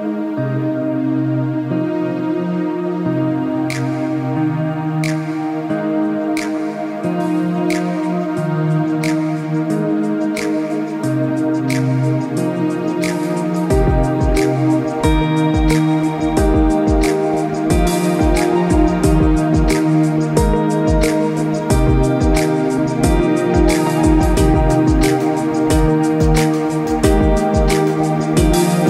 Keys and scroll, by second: 13.9 ctrl+-, 15.5 ctrl+-, 15.8 ctrl+=, 21.2 ctrl+=, 21.3 ctrl+c, 21.7 ctrl+v, 23.0 ctrl+v, 23.4 ctrl+t.